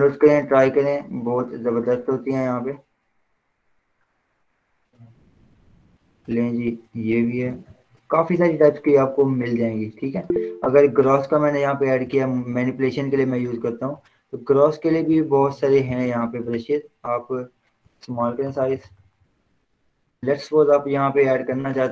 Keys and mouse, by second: 1.0 ctrl+z, 2.8 click, 6.4 click, 7.7 ctrl+z, 9.4-11.2 drag, 16.6 click, 18.1-20.7 typing, 21.8 click.